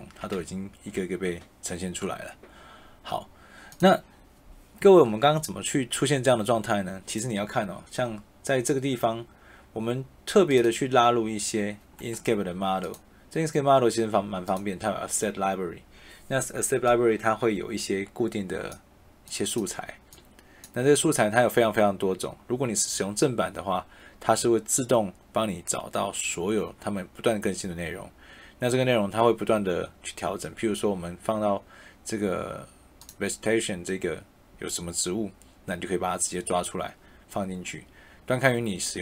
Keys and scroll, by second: 0.3 e.